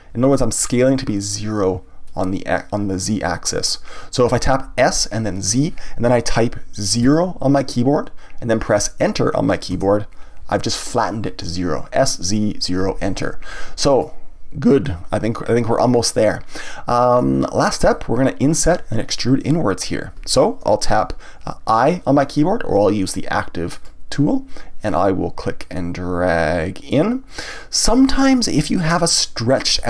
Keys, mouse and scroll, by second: 9.8 KP_Enter, 13.2-15.4 middle drag, 15.4-16.6 scroll up 2, 16.6-19.6 middle drag, 23.7 click, 24.8-25.7 scroll up 1, 25.7 click, 27.8-29.8 middle drag.